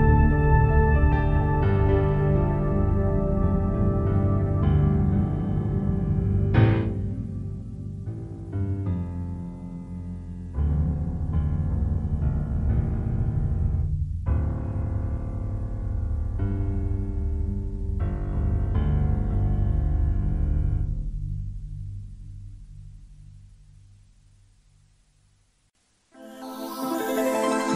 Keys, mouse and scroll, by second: 0.5 right click, 6.5 click, 8.0 click, 11.9 click, 16.4 click, 17.4 click, 18.5 middle click, 19.2 scroll down 1, 19.5-20.0 scroll up 2, 20.7 right click, 23.0 click.